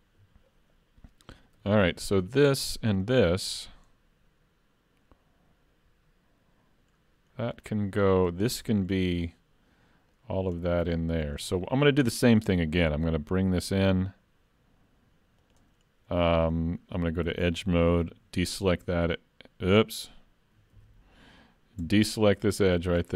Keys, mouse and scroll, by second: 1.6 3, 2.2 click, 2.9 shift+click, 3.4 middle click, 7.3 scroll down 1, 7.7 middle click, 8.3-8.6 scroll up 2, 8.6 shift+middle click, 10.1 middle click, 10.6 shift+middle click, 11.0 middle click, 11.5 shift+middle click, 12.5 e, 15.8 scroll up 2, 16.1 shift+middle click, 16.6 middle click, 17.3 2, 18.5 alt+click, 20.8 ctrl+z, 22.7 shift+click.